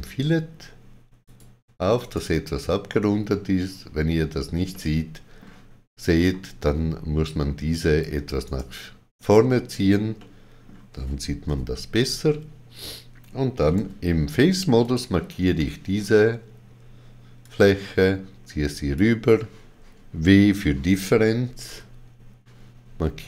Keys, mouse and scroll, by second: 0.4-1.1 typing, 1.2 shift+click, 1.9 right click, 4.6 middle click, 4.6 right click, 4.6 shift+click, 6.1 g, 7.2 click, 8.4 right click, 9.1 right click, 10.1 middle click, 13.7 3, 14.8 click, 15.5 middle click, 17.4 click, 21.6 w.